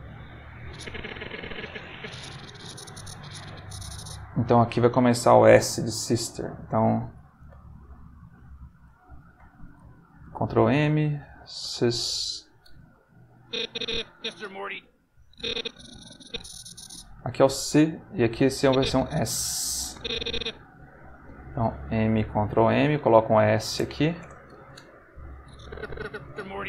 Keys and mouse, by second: 0.6 click, 1.8-4.1 drag, 9.1 m, 10.3 ctrl+m, 11.0-12.1 typing, 13.4 click, 14.2 space, 15.2-17.0 drag, 18.6 click, 19.6 click, 21.7 m, 22.5 ctrl+m, 23.1 shift+s, 23.7 shift+Return, 25.4 click, 26.2 space.